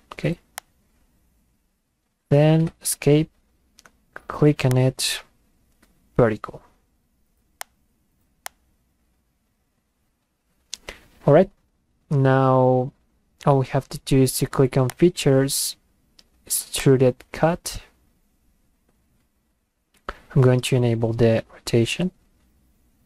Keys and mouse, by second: 0.6 click, 3.0 Escape, 4.7 click, 7.6 click, 8.5 click, 14.9 click, 16.8 click.